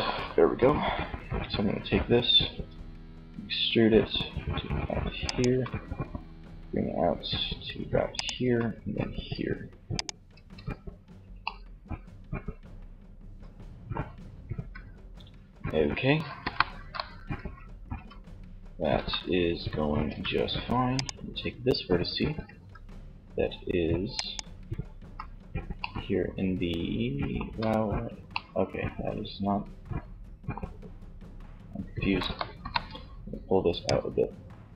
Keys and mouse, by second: 1.6 e, 4.6-6.0 drag, 4.6 e, 7.5 e, 9.7 z, 10.6 middle click, 15.4 KP_1, 17.0 Tab, 18.0 z, 19.2 Tab, 21.6 z, 24.2 z, 26.3 z, 31.7 KP_3.